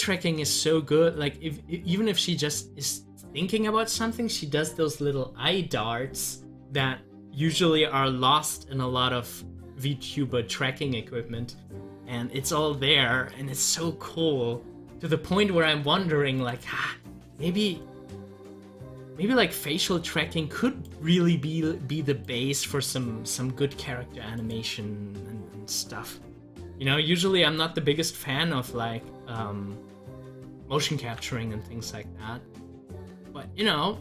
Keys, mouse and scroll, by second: 0.3-1.9 middle drag, 1.9 scroll up 1, 12.0 scroll down 1, 12.5-15.8 middle drag, 16.4 click, 17.0 scroll up 1, 24.9 scroll up 1, 28.2-31.0 drag, 31.0 ctrl+z, 33.4 ctrl+z.